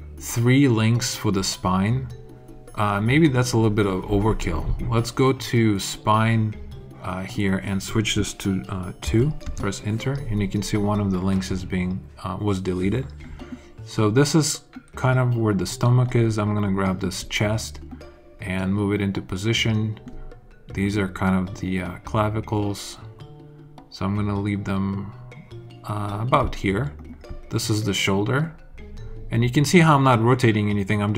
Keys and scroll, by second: 9.0 2, 9.4 Return.